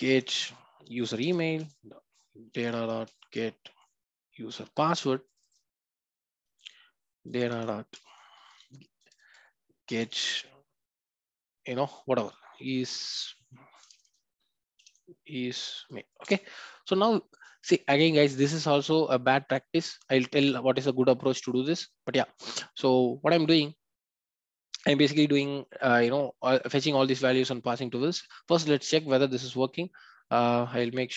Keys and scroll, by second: 1.2 Return, 16.2 Return.